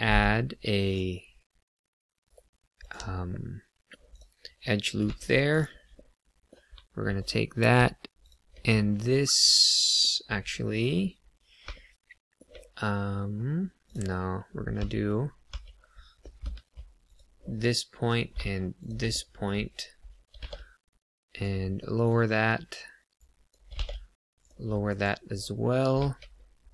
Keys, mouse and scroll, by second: 2.2 right click, 2.7 click, 3.3 middle click, 4.1 click, 5.0 2, 5.5 click, 5.9 middle click, 7.1-7.7 scroll up 1, 8.2 shift+click, 8.6 middle click, 13.8 click, 14.7 Tab, 15.4 Tab, 16.4 1, 17.0 click, 17.5 middle click, 18.7 shift+click, 19.0 middle click, 20.3 g, 20.4 z, 21.3 click, 21.7 middle click, 23.1 click, 23.6 g, 24.3 click, 24.8 KP_1, 26.2 scroll down 1.